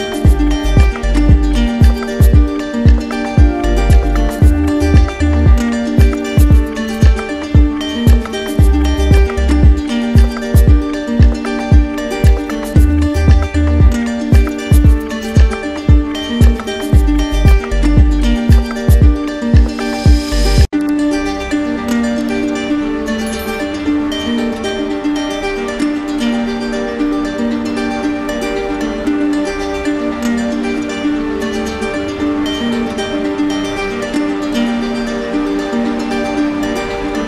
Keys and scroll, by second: 1.4 ctrl+alt+shift+e, 27.2 ctrl+alt+z, 30.7 ctrl+alt+shift+e.